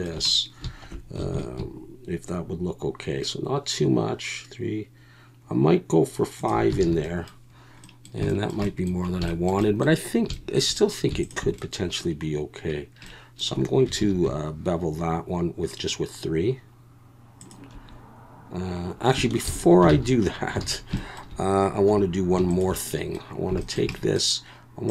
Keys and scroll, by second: 1.3 ctrl+b, 6.8 alt+a, 14.0 ctrl+b, 19.4 ctrl+z, 19.9 ctrl+z, 20.6 alt+a, 21.9 2.